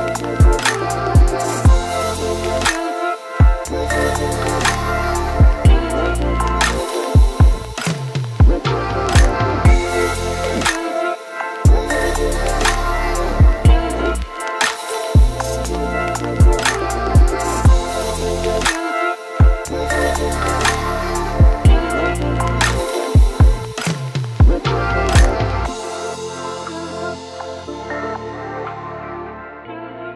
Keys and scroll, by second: 9.0 ctrl+t, 16.4 v, 19.0-19.3 space, 20.1 v, 20.7 ctrl+t, 23.3 ctrl+d.